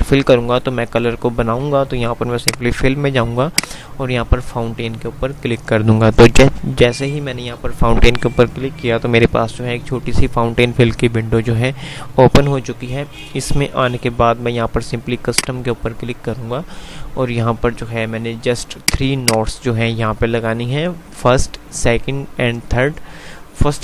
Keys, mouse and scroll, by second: 0.6 F5, 2.3 click.